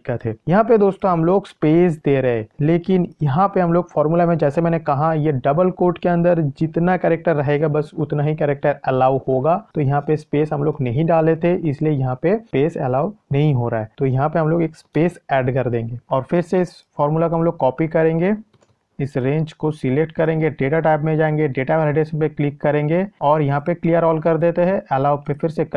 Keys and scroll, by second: 18.6 ctrl+c.